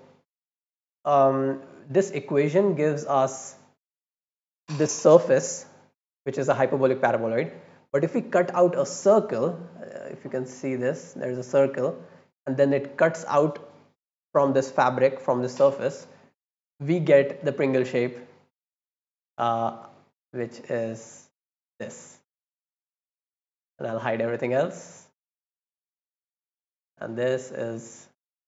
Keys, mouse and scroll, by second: 0.3 middle click, 0.9 click, 1.7 click, 2.7-3.8 right drag, 16.9 scroll up 2, 17.3 right click, 18.6 scroll down 2, 19.3 scroll up 2, 19.5 click, 20.3-21.0 middle drag, 21.0 click, 22.2 click, 22.6 scroll down 1, 23.0 right click, 23.3 scroll down 1, 23.8-24.2 drag, 24.9 middle click, 25.6 click, 26.1 click, 26.7-28.4 right drag.